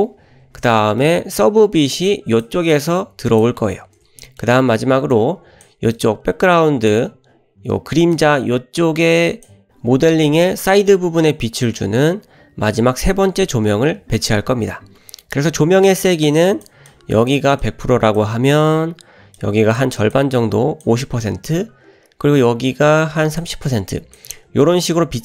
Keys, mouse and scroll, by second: 0.8 shift+middle click, 2.0 click, 2.7 click, 4.2 shift+middle click, 5.1 click, 6.0-7.1 drag, 8.1-9.5 drag, 10.1 click, 16.5 click, 16.9 click, 17.6 click, 19.4 click, 20.0 click, 20.3 click, 22.7 click, 23.7 click.